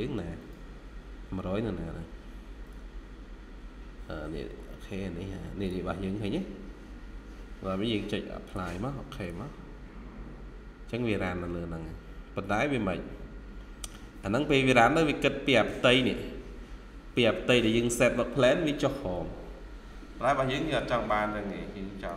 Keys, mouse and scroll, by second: 0.7-4.7 scroll down 1, 11.5 scroll up 1, 13.4 scroll down 1, 13.8 middle click, 14.3 scroll down 1, 15.0 scroll up 1, 19.8 scroll down 1, 20.4 middle click, 20.9 Escape, 21.2-21.7 scroll up 1.